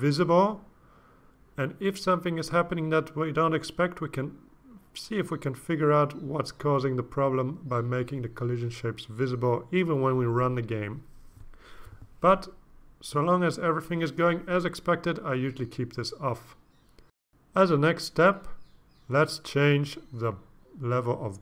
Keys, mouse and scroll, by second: 0.1 click, 3.7 click, 4.9 click, 6.8 click, 8.0 click, 14.1 click, 14.6 click, 16.0 click, 21.2 click.